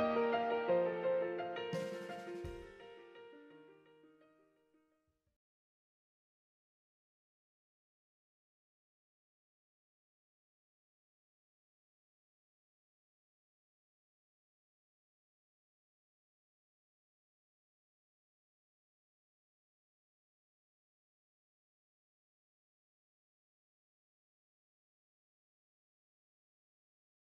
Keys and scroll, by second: 0.1 super+z, 1.4 super+z, 2.9 super+z, 4.1 super+z, 8.7 0, 9.0 super+-, 9.7-10.7 typing, 12.3-13.5 typing, 15.6-16.3 typing, 21.6-22.4 typing, 25.1 Delete, 26.0 z.